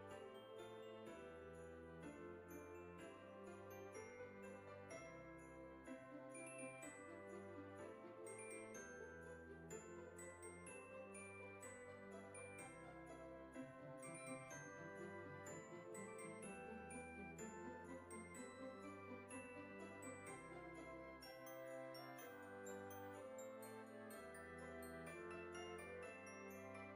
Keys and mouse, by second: 1.2 e, 1.6 s, 3.4 click, 3.7 e, 5.1 click, 5.5 middle click, 7.1 Tab, 9.1 middle click, 9.8 right click, 10.2 click, 11.0 Tab, 11.7 KP_1, 12.6 shift+middle click, 14.1 click, 15.6 click, 18.8 shift+click, 22.0 shift+click, 23.5 shift+click, 25.6 middle click, 26.8 shift+click.